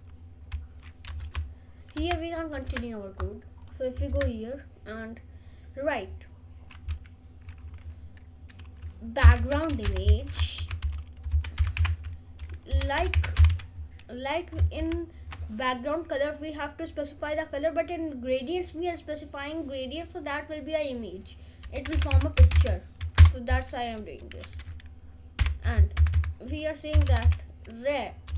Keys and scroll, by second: 1.3 BackSpace, 2.1 BackSpace, 4.0 Return, 8.9-13.7 typing, 15.2 shift+;, 21.8-23.2 typing, 23.4 Return, 24.5 Right, 25.4 ;, 26.8 Left, 27.1 r.